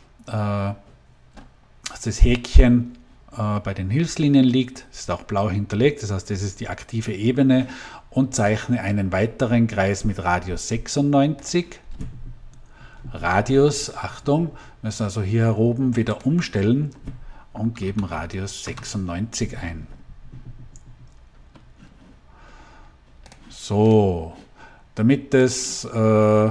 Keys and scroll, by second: 17.6 9, 18.0 6, 18.5 Return.